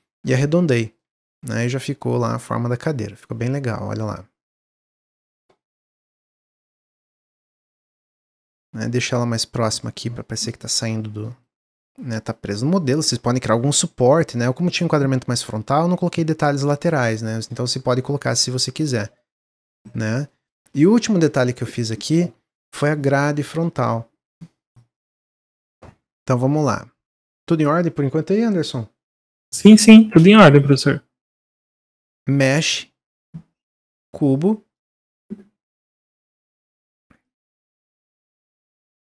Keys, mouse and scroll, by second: 0.9-1.4 middle drag, 1.4 click, 1.7-3.1 middle drag, 3.1-3.5 scroll down 1, 3.5-6.7 middle drag, 6.7 scroll up 1, 7.1 g, 10.6-11.5 middle drag, 11.5 click, 12.0-14.4 middle drag, 14.4 scroll down 2, 14.7-16.3 middle drag, 16.3-16.7 scroll up 1, 16.8-18.0 middle drag, 18.0-18.3 scroll down 1, 18.3 middle click, 18.6 scroll down 1, 18.9-20.6 middle drag, 20.6 click, 20.9 Tab, 21.2 Tab, 21.6-21.9 scroll down 2, 21.9-25.0 middle drag, 25.4 drag, 27.0-30.2 drag, 35.7-36.7 drag, 37.7 click.